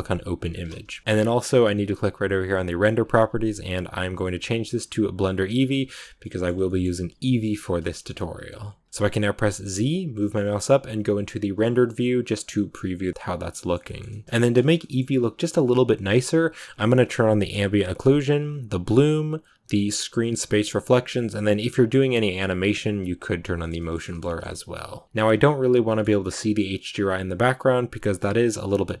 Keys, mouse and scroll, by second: 0.4-1.0 scroll down 1, 1.0-5.2 middle drag, 5.2 click, 6.2-11.8 middle drag, 11.8 z, 12.4-15.0 middle drag, 15.0-16.0 scroll up 1, 16.0 scroll up 1, 16.0-18.5 middle drag, 18.5 click, 23.5 shift+middle click, 23.9-24.6 scroll up 2, 23.9 shift+middle click, 24.6 middle click, 25.2 scroll down 1, 25.3-26.8 middle drag, 26.1 scroll up 1, 26.8-27.1 scroll down 2, 27.9-29.0 middle drag.